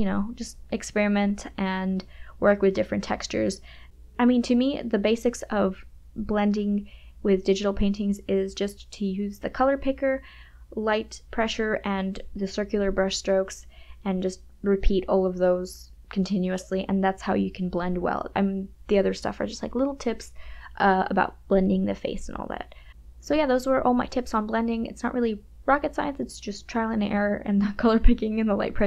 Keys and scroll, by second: 2.4 ], 2.6 KP_Subtract, 7.5 m, 7.7 KP_Add, 7.8 space, 8.2 KP_Subtract, 9.7 Return, 9.8 KP_Add, 10.7 [, 11.3 ], 15.2 [, 16.0 ], 17.1 e, 27.2 KP_Add, 27.3 space, 27.6 [.